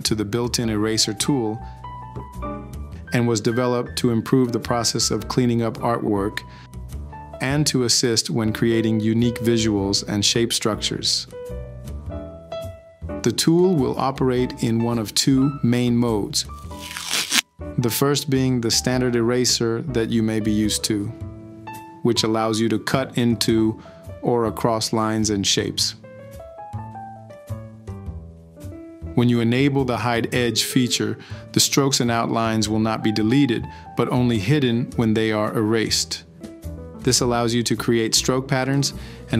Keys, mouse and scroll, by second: 1.2 e, 4.6 p, 8.8 click, 21.0 ctrl+z, 24.3 ctrl+z, 35.7 click.